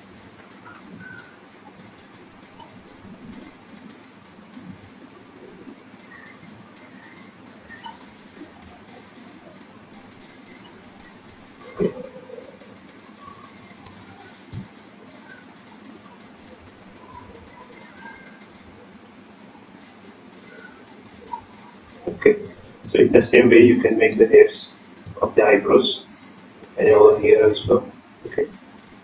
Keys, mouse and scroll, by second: 0.2-0.5 scroll up 7, 0.7 middle click, 2.1-2.5 scroll up 2, 3.3 scroll up 1, 3.4 shift+middle click, 4.0 scroll up 1, 4.3 middle click, 6.0 middle click, 6.0-6.3 scroll down 1, 6.3 middle click, 6.6 scroll down 3, 6.8 middle click, 7.4 middle click, 7.8 scroll up 1, 8.3 shift+middle click, 8.6 scroll up 2, 8.9 middle click, 9.3 scroll down 2, 9.5 middle click, 9.9-10.6 scroll up 2, 10.2 middle click, 10.7 scroll down 1, 11.4-12.1 scroll up 2, 12.1 middle click, 12.3 middle click, 12.8 shift+middle click, 13.8 click, 15.1 BackSpace, 16.3 click, 17.0 click, 18.0 click, 22.4 click, 23.8 click.